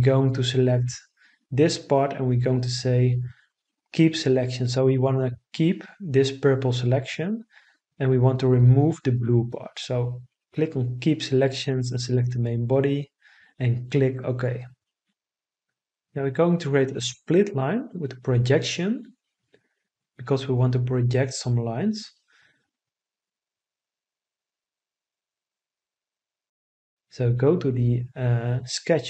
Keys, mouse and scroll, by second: 16.3 s, 17.6 l, 18.2 i, 19.2 t.